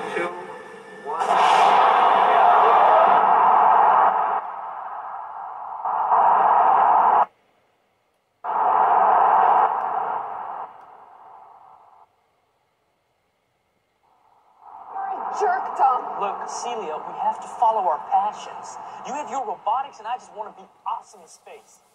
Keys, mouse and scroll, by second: 11.9 typing.